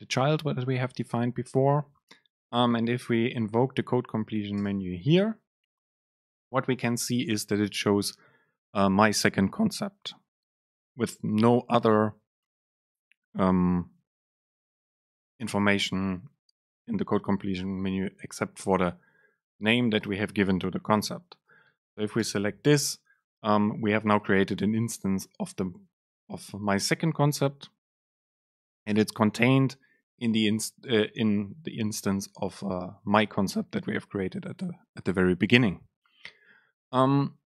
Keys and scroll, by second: 4.7 super+space.